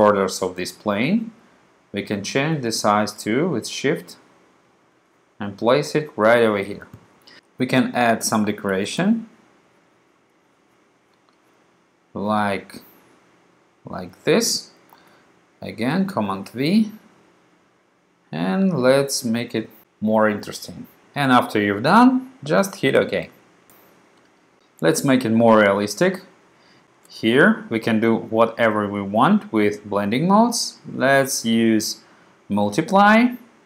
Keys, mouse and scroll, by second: 2.7-4.2 drag, 5.0-6.5 drag, 6.5 click, 8.9 super+v, 10.5-13.6 drag, 13.7-14.9 drag, 15.0 super+v, 16.5-18.1 drag, 18.3 click, 19.3 click, 23.0 click.